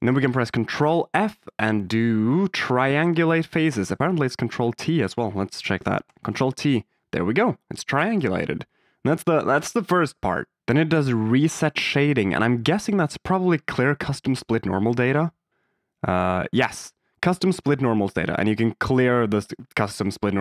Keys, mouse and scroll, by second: 0.0 click, 0.6 ctrl+f, 6.0 ctrl+t, 8.1 Tab, 12.2 click, 12.7 Tab, 14.9 Tab.